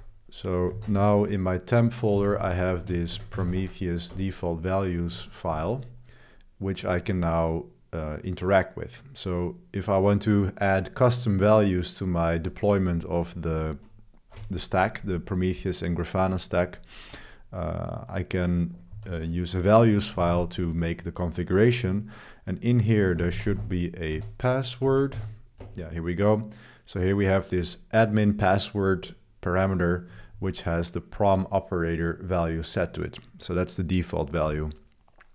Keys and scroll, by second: 0.7 ctrl+b, 2.1-14.3 typing, 16.2-16.8 typing, 18.9-21.2 typing, 22.5-25.3 typing, 25.6 Return, 29.8-30.8 typing.